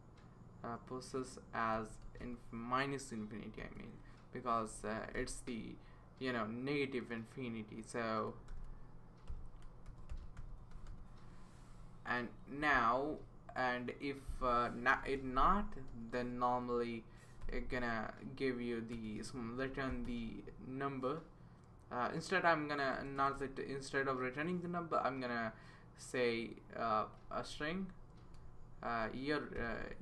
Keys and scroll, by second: 1.5-2.5 typing, 3.6 _, 4.7 BackSpace, 5.1 -, 8.5-11.4 typing, 14.9 Return, 15.6-17.1 typing, 17.4 Return, 18.9-20.5 typing, 23.0 BackSpace, 23.2 BackSpace, 23.3 BackSpace, 28.4 BackSpace.